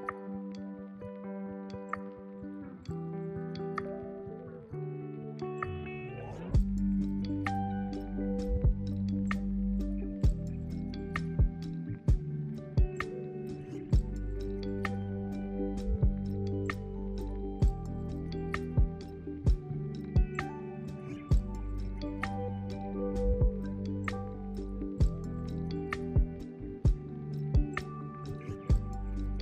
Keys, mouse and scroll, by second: 0.0 scroll up 2, 0.3-2.1 right drag, 0.3 shift+middle click, 0.9 middle click, 2.1 click, 2.4 middle click, 2.6-3.3 scroll up 5, 3.3 middle click, 4.2-4.8 scroll down 8, 5.0 middle click, 5.8-14.5 drag, 7.4 ctrl+KP_Add, 7.4-14.5 right drag, 7.7 ctrl+KP_Add, 8.0 ctrl+KP_Add, 8.4 ctrl+KP_Add, 9.0 ctrl+KP_Add, 9.4-13.1 ctrl+KP_Add, 14.5 KP_1, 15.8 ctrl+KP_Add, 16.3-17.8 ctrl+KP_Add, 18.0 ctrl+KP_Add, 18.2 ctrl+KP_Add, 18.5 ctrl+KP_Add, 18.8 ctrl+KP_Add, 19.9 ctrl+KP_Add, 22.5-24.3 scroll up 1, 24.3 shift+d, 27.2 p, 29.2 Tab.